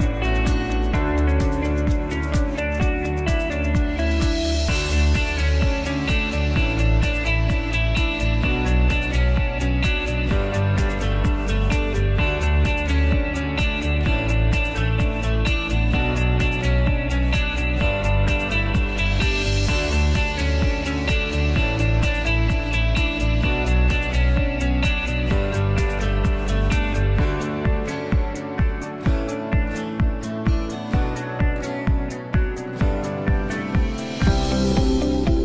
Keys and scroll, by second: 33.1-35.4 typing.